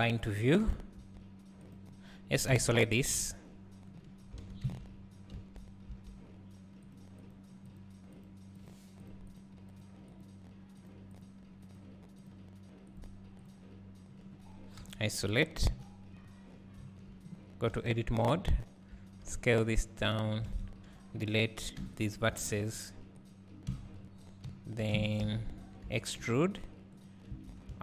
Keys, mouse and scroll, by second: 0.0-1.0 drag, 3.2 KP_Divide, 4.5 alt+a, 7.8 click, 8.7 click, 9.4 click, 11.3 click, 13.1 click, 14.9 KP_Divide, 15.7 KP_1, 16.8 Tab, 17.7 e, 20.5 alt+a, 22.3 b, 22.4 x, 23.9 Tab, 25.1 Tab, 25.3 a, 25.9 e, 27.3 Tab.